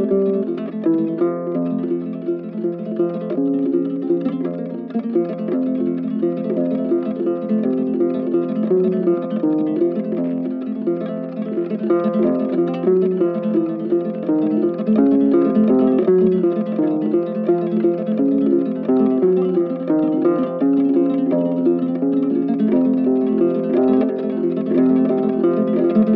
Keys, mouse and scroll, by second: 3.4 double click, 5.6 right click, 6.9 ctrl+z, 8.8 ctrl+z, 10.6 ctrl+z, 10.8 ctrl+right click, 13.6 double click, 15.1 right click, 15.6 double click, 15.7 right click, 17.4 alt+click, 19.0 alt+click, 19.8 alt+click, 20.4 right click, 25.6 right click.